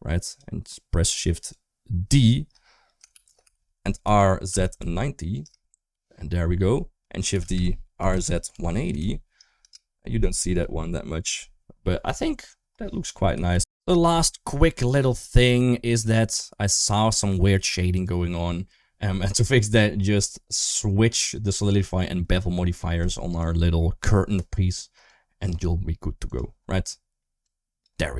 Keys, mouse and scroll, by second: 1.2 click, 2.9 shift+d, 3.9 r, 7.2 shift+d, 7.8 r, 11.9 click, 17.7 click, 24.9 click, 26.1 click, 27.2 click.